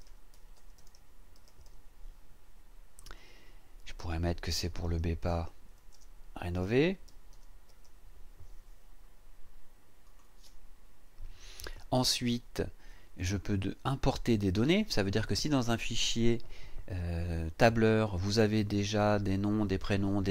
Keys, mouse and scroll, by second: 0.0-2.1 typing, 3.0 click, 4.4-8.2 typing, 10.0 click.